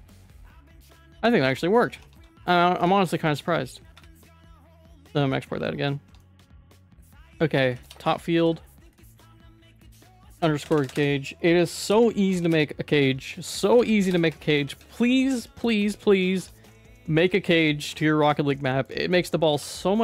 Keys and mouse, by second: 0.6-1.8 middle drag, 2.0 Tab, 2.2 q, 4.6 click, 5.0 ctrl+s, 5.2 middle click, 5.4 shift+middle click, 6.1 Tab, 6.2 middle click, 6.9 Tab, 7.1 right click, 7.7 shift+d, 8.0 F2, 9.1 Right, 9.2 Right, 9.3 Right, 9.7 Right, 10.0 Right, 10.1 Right, 10.2 Right, 10.7 BackSpace, 10.8 BackSpace, 10.9 BackSpace, 13.4 F2, 14.8 ctrl+s, 16.2 middle click, 16.4 Tab, 16.7 shift+middle click, 17.4 ctrl+s, 18.5 middle click, 19.0 shift+middle click, 19.6 ctrl+r.